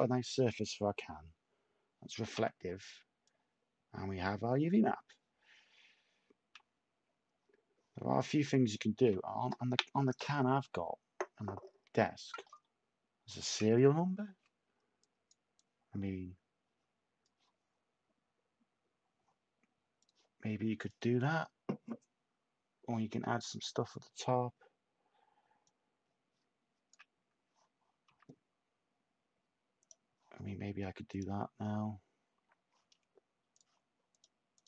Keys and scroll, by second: 2.3 s, 28.0 s.